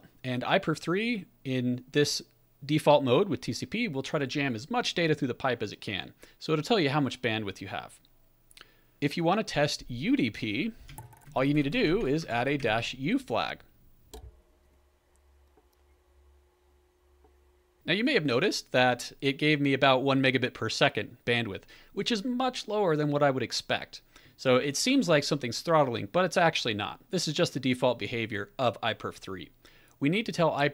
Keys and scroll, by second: 10.9 Up, 11.2 alt+b, 11.4 alt+b, 11.6 alt+b, 11.8 alt+f, 12.1-13.3 typing, 14.1 Return.